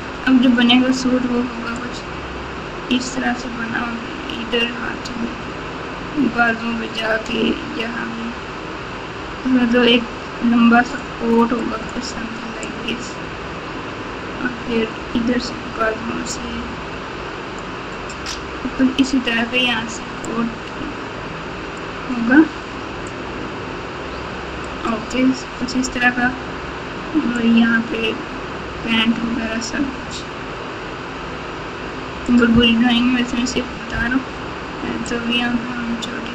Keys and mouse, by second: 1.7-11.0 drag, 12.6-17.6 drag, 20.2-21.8 drag, 23.0-24.6 drag, 27.3-32.2 drag, 35.0-36.3 drag.